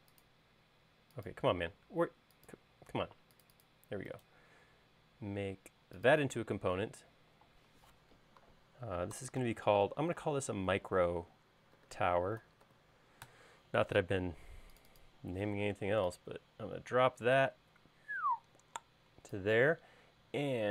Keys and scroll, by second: 9.3-10.3 typing, 11.9-14.3 typing, 13.6 Return, 15.9 p.